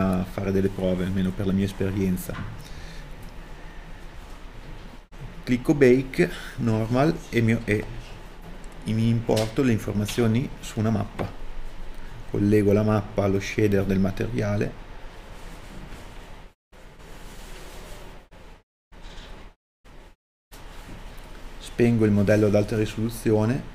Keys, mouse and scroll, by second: 0.8 KP_Enter, 23.2 a.